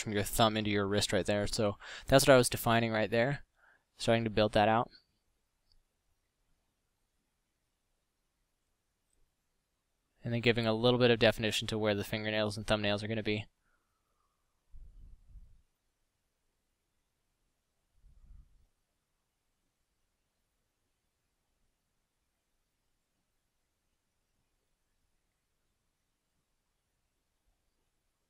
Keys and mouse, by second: 5.1-5.5 middle drag, 6.7 f, 9.2 f, 17.0-18.2 middle drag, 26.9 f.